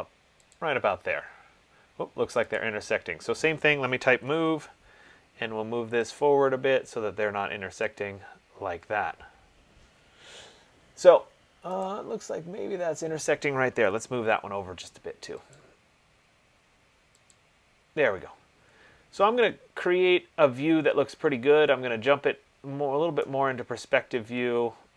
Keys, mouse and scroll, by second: 2.9 click, 4.2-4.5 typing, 4.6 Return, 6.6 click, 8.2 click, 9.7 typing, 12.1 click, 14.0-14.5 typing, 15.8 click, 17.6 click, 23.3 right click, 24.0 middle click, 24.1 middle click, 24.6 middle click.